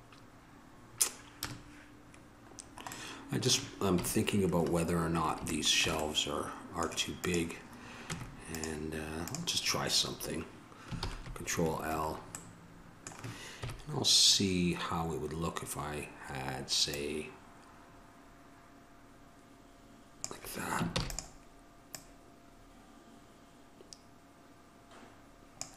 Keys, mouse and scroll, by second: 1.6 KP_0, 1.8 middle click, 2.9-4.2 middle drag, 5.8 middle click, 7.4 right click, 8.2 Tab, 11.2 ctrl+l, 13.8 KP_1, 17.1-20.4 drag, 21.2 shift+d.